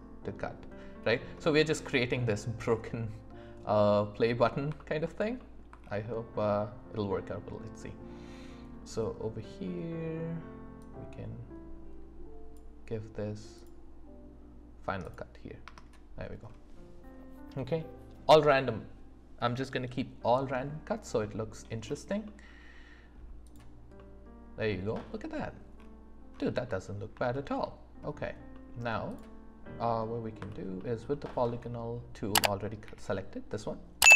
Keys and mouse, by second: 1.4-4.3 middle drag, 10.8 click, 13.5 click, 15.0 click, 15.7 space, 21.2 middle click, 22.2 middle click, 22.7 click, 22.7 right click, 23.5 click, 23.9-25.5 drag, 23.9-25.5 right drag, 26.6 middle click, 27.3 shift+middle drag, 28.5 middle click, 29.1 click, 32.8 d.